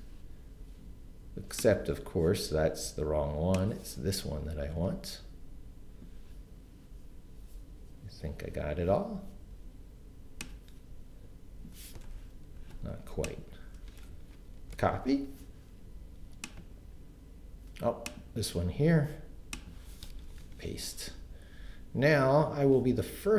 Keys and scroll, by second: 14.7 shift+super+c, 20.0 Return, 20.4 super+v.